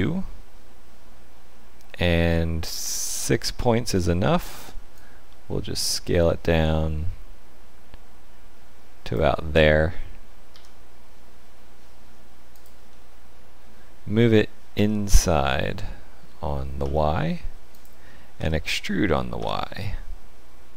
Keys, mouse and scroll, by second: 4.9 shift+click, 10.5 s, 12.9 middle click, 14.7 g, 18.3 e.